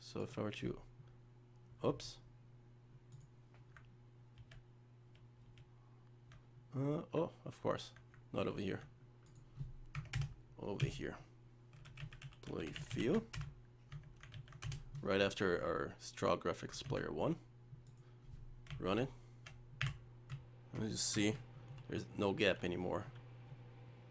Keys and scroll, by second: 4.4 ctrl+z, 14.4 ctrl+v, 16.8 ctrl+s.